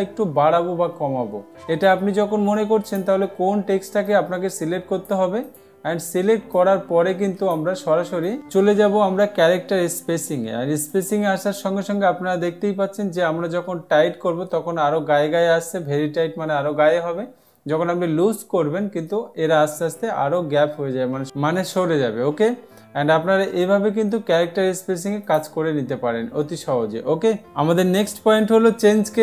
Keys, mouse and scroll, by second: 3.4 click, 4.6-5.6 drag, 6.0-7.0 drag, 11.5-12.5 drag, 25.8 click.